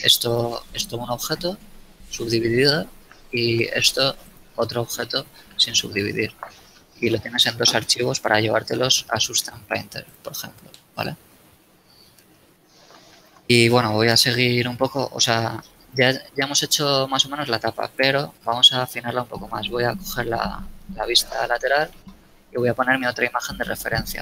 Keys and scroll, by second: 2.1 z, 3.1 z, 4.8 z, 5.8 a, 6.1 z, 12.1 z, 14.2 KP_1, 18.2 n, 22.2 n.